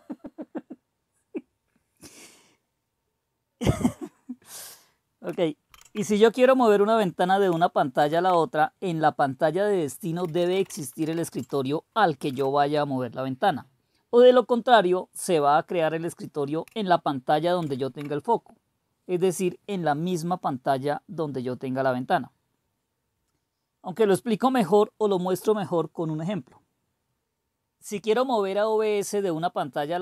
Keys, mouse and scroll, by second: 5.6 super+1, 7.9 super+Return, 9.9-11.4 typing, 12.2 Return, 17.6 super+3.